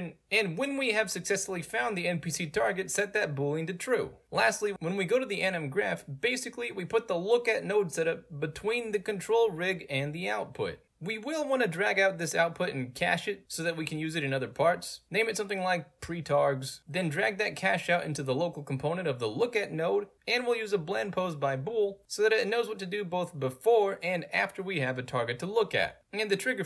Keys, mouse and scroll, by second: 3.1 click, 4.5 click, 6.1-7.1 drag, 7.5 click, 8.6 click, 9.9 click, 10.9 scroll up 2, 11.0 middle click, 11.1 right click, 11.9 click, 12.5 h, 13.9 click, 15.7 click, 17.6 click, 18.6-19.1 right drag, 19.2 middle click, 19.2 scroll down 2, 19.3 right click, 20.1 click, 20.5-21.0 right drag, 21.8 click, 21.9 right click, 22.9 click, 23.1 ctrl+click, 23.3 ctrl+click, 23.5 click, 24.8 ctrl+click.